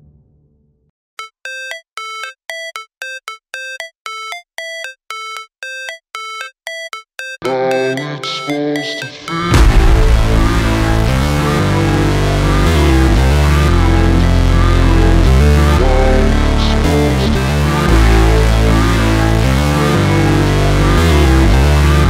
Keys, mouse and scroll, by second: 10.5 click, 11.0 F9, 11.8-14.5 drag, 14.5-15.4 alt+scroll up 1, 16.1 v, 17.5 g, 17.9 click, 19.0 v, 19.5 click, 20.8 shift+Up.